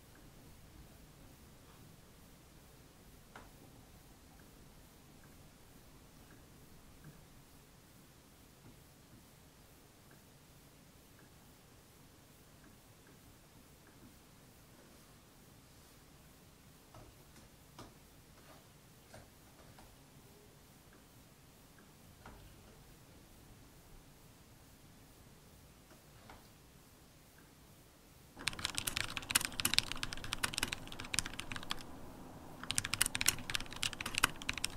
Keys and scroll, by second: 28.9 super+,.